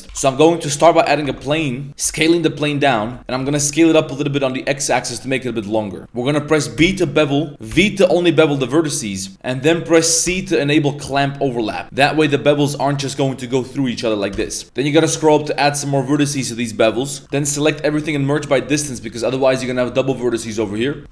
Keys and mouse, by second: 6.7 ctrl+b.